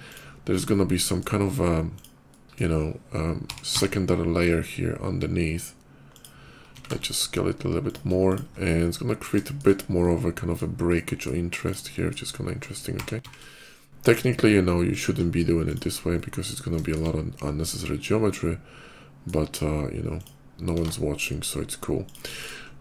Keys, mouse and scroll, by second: 0.2 middle click, 0.3 middle click, 0.4 middle click, 1.6 click, 2.1 middle click, 3.3 r, 3.5 x, 5.9 click, 6.8 shift+s, 7.7 click, 8.1 click, 8.4 middle click, 8.5 shift+middle click, 9.2 shift+middle click, 9.8 shift+middle click, 10.7 shift+middle click, 11.4 shift+click, 11.6 shift+middle click, 12.8 r, 13.1 x, 13.4 r, 14.7 click, 15.3 shift+click, 15.3 shift+middle click, 15.7 scroll down 1, 15.9 shift+middle click, 16.6 shift+middle click, 16.9 scroll up 1, 17.2-18.9 shift+middle drag, 19.9 click, 21.9 click, 22.2 click.